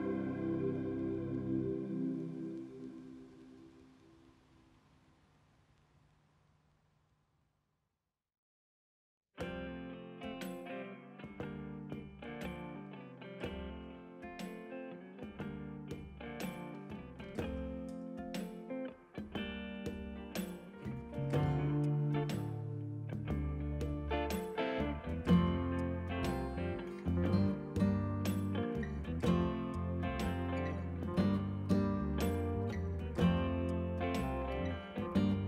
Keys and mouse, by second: 0.2 Pause, 2.2 click, 3.7 click, 4.2 ctrl+1, 4.2 click, 6.0 ctrl+1, 6.1 click, 7.0 click, 8.1 ctrl+1, 8.2 click, 9.2 click, 12.8 click, 13.1 click, 15.2 ctrl+shift+x, 15.4 click, 16.2 ctrl+1, 16.4 click, 18.1 ctrl+1, 18.2 click, 18.4 ctrl+click, 26.6 ctrl+click, 26.8 1, 27.9 click, 28.4 ctrl+click, 29.4 ctrl+shift+x, 29.6 click, 30.5 ctrl+shift+a, 30.7 click, 31.5 a, 31.5 click, 31.7 Escape, 31.8 click, 33.7 ctrl+q, 33.8 click.